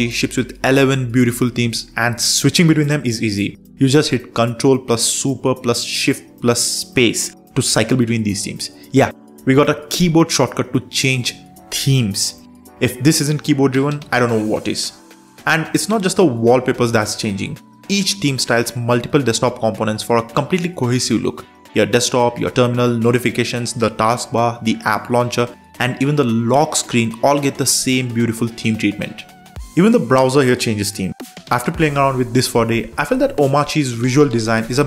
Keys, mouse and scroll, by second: 0.2 super+3, 2.0 ctrl+shift+super+space, 3.7 Return, 7.6 super+space, 8.0-9.0 typing, 12.0 super+b, 15.7 super+4, 17.4 ctrl+shift+super+space, 18.6 Down, 18.9 Return, 22.6 super+2, 23.9 super+3, 26.9 super+4, 28.6 ctrl+shift+super+space, 29.7 Down, 30.4 Down, 30.8 Return, 34.7 super+3.